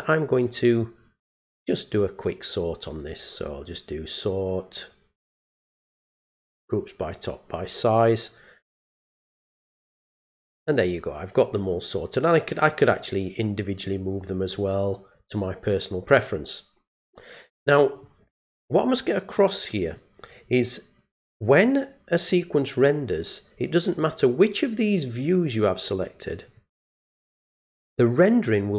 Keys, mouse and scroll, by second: 1.4 right click, 6.3 click, 10.4-11.9 drag, 14.2 click, 17.0 click, 19.3 click, 23.9 click, 26.5 click.